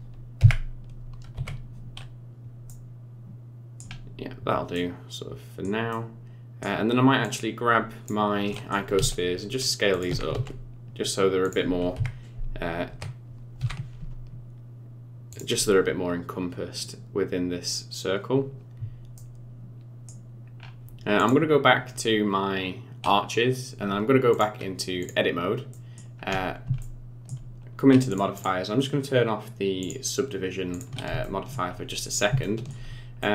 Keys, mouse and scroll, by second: 0.4 KP_1, 1.3 KP_3, 2.7 middle click, 4.1 scroll down 3, 4.7 middle click, 5.9 middle click, 7.2 click, 8.5 middle click, 8.9 s, 10.1 g, 11.9 KP_1, 12.9 KP_3, 13.6 g, 19.2 middle click, 20.6-21.2 scroll up 3, 21.2 click, 24.3 click, 25.7 middle click, 26.2-26.6 scroll up 5, 26.8 shift+middle click, 28.1 click, 28.3 click, 29.8 click, 30.7 click, 31.2 shift+middle click, 31.7-32.1 scroll up 7, 32.4 shift+middle click, 33.2 middle click.